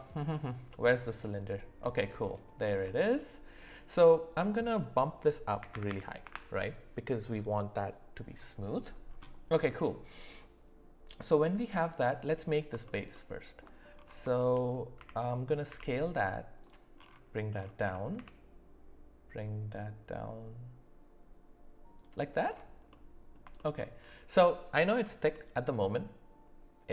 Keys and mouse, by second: 1.8 middle click, 2.8 shift+middle drag, 4.3-6.2 drag, 5.9 KP_0, 9.7 middle click, 14.4 shift+middle click, 15.0 s, 17.8 s, 22.9 middle click, 23.5 shift+middle click, 25.3 middle click.